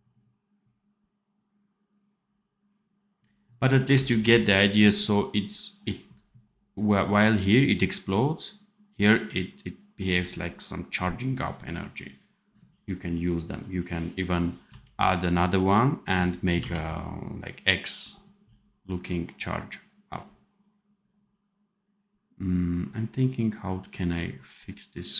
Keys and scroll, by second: 4.0 ctrl+s, 14.6 c, 16.5 ctrl+z.